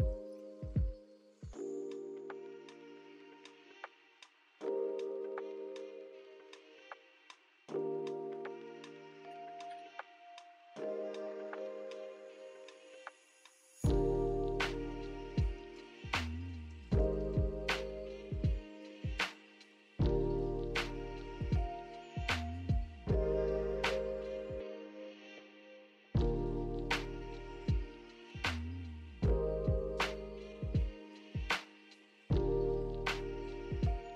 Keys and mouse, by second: 1.8 click, 2.2 click, 3.1 shift+click, 5.1 click, 6.3 click, 10.7 click, 11.7 click, 13.8 click, 15.6 click, 16.1 Tab, 17.0 click, 18.1 click, 18.9-20.0 drag, 20.4 click, 21.6 Tab, 23.4 shift+click, 25.0 click, 25.1 middle click, 25.2 click, 26.3 middle click, 27.9 click, 28.5 click, 29.3-30.1 drag, 31.3 Tab, 32.7 click, 33.5-34.1 drag.